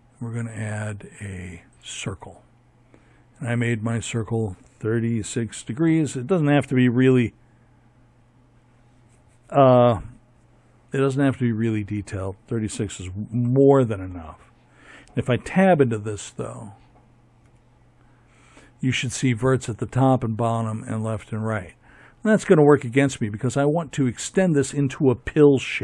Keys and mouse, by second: 1.5-3.7 drag, 13.6 Tab, 15.3 a.